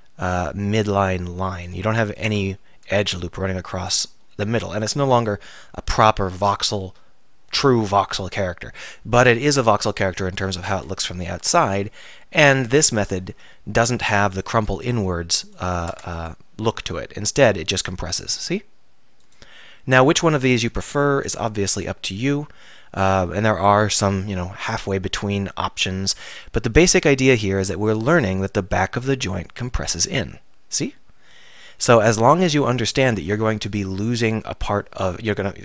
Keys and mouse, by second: 0.9 click, 2.5 f, 4.0 middle click, 11.1-13.4 typing, 16.0 Tab, 16.9 r, 19.4-22.2 drag, 20.9 r, 23.6-33.1 middle drag, 33.1 click.